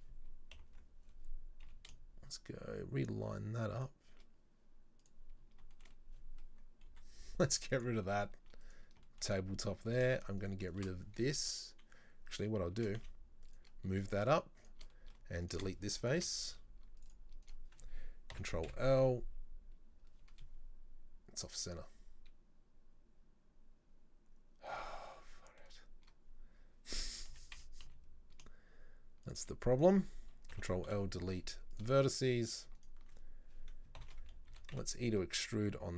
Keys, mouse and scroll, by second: 0.6 ctrl+l, 1.7 g, 5.4 scroll down 2, 5.8-7.0 shift+middle drag, 7.0 Delete, 9.1 shift+middle click, 9.5-10.0 scroll up 1, 10.0 right click, 10.2 shift+right click, 10.5 shift+right click, 10.7 shift+right click, 12.8 shift+d, 14.0 right click, 14.3 shift+right click, 14.7 shift+right click, 15.0 middle click, 15.5 shift+right click, 16.2 Delete, 17.1 click, 17.5 right click, 18.4 ctrl+l, 18.7 KP_7, 20.1 scroll up 1, 25.4-27.4 middle drag, 27.4 g, 29.8 right click, 30.6 ctrl+l, 30.9 Delete, 32.8 alt+right click, 34.1 ctrl+l, 34.6 e.